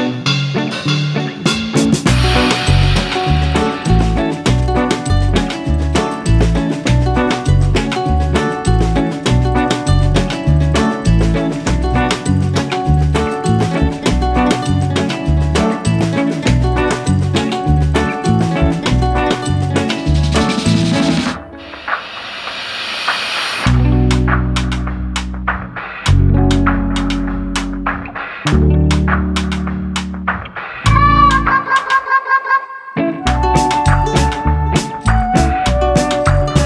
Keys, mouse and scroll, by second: 0.8 middle click, 1.1-1.4 scroll up 3, 1.4 middle click, 2.2 click, 3.2 click, 3.7 s, 5.4 scroll down 1, 5.5 s, 7.3 s, 9.4 s, 10.6 scroll down 1, 10.8 middle click, 11.2-11.8 scroll up 1, 11.8 Tab, 12.6 ctrl+r, 14.8 middle click, 15.5 click, 16.3 ctrl+r, 18.2-20.2 middle drag, 20.4 Tab, 20.7 Tab, 21.8 click, 22.6 shift+click, 23.0 shift+click, 23.2 shift+click, 23.5 middle click, 24.1 shift+click, 24.4 shift+click, 24.7 shift+click, 25.1 shift+click, 25.5 shift+click, 25.9 middle click, 26.9-27.6 scroll down 1, 27.6 click, 28.0-28.6 scroll up 1, 31.0-32.6 drag, 33.6-35.6 drag, 36.0-36.5 scroll down 1, 36.5 middle click.